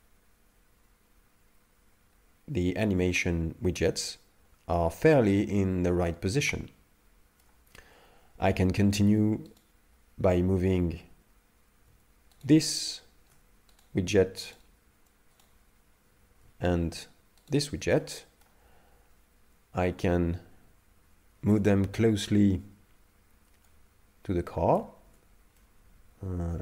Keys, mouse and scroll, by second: 9.6 right click, 12.5 shift+right click, 13.9 right click, 14.6 right click, 15.5 right click, 15.6 right click, 17.5-18.0 shift+right click, 18.0 middle click, 21.5 Tab, 23.7 click, 25.1 Tab, 25.6 middle click.